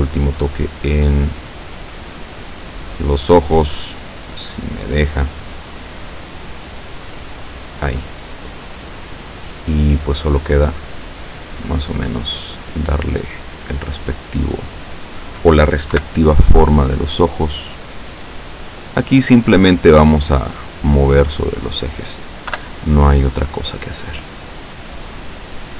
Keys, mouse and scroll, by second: 6.1 click, 7.7 click, 10.2 right click, 11.1 right click, 12.2-13.5 drag, 13.6 middle click, 14.9 right click, 16.0 KP_7, 17.2-19.0 drag, 20.8 right click, 21.3-22.2 middle drag, 22.6 KP_7, 23.6-25.7 drag.